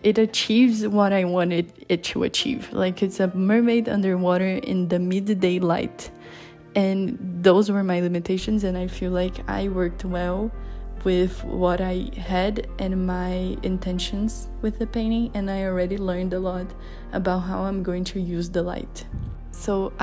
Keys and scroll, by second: 19.4 [.